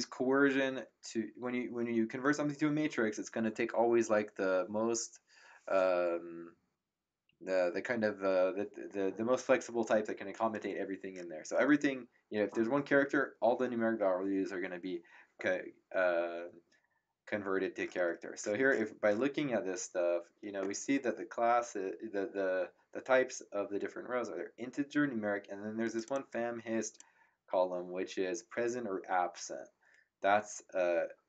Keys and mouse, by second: 25.9 click.